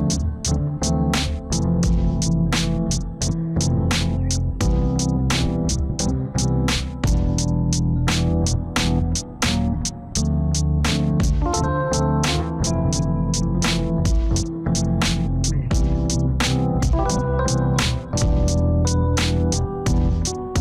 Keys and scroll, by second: 0.4 F4, 16.1 F4.